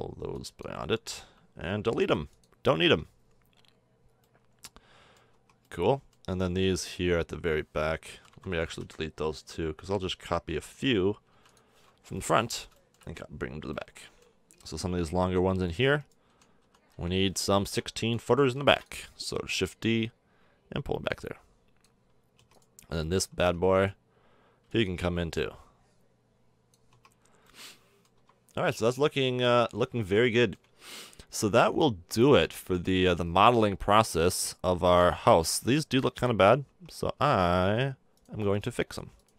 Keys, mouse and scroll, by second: 2.0 x, 2.6 a, 2.8 Tab, 4.1 middle click, 5.3 Tab, 6.7 a, 8.1 l, 8.3 l, 8.5 l, 8.8 l, 10.4 l, 11.3 x, 11.9-14.5 drag, 15.2 k, 16.3 l, 16.6 l, 16.9 l, 18.5 shift+d, 22.4 Tab, 23.3 Tab, 24.6 b, 26.9 Tab, 28.1 KP_0, 32.1-32.5 middle drag, 36.6 Tab, 37.1 Tab, 37.5 Tab.